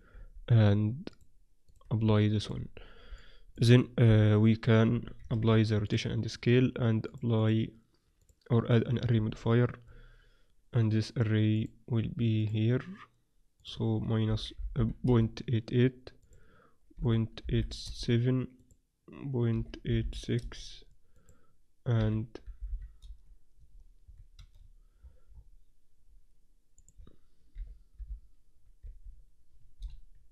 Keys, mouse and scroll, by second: 0.1 z, 0.5 z, 2.2-4.0 middle drag, 2.6 z, 4.0 KP_7, 4.9 z, 5.3 ctrl+a, 7.0-9.1 drag, 9.1-11.5 middle drag, 9.1 z, 11.5-15.5 drag, 14.7 8, 16.1-18.0 drag, 18.5-20.5 drag, 21.1-23.1 drag, 24.1-26.7 middle drag, 24.3 a, 26.7-28.7 drag.